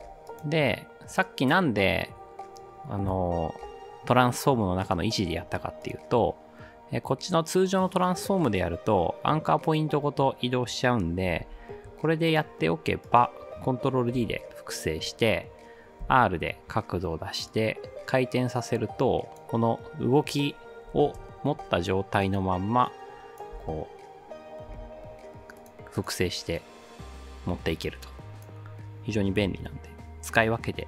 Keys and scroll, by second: 11.4 v, 14.2 ctrl+d, 16.0 r, 20.7-21.5 typing, 23.5 space, 24.7 space, 29.5 ctrl+d.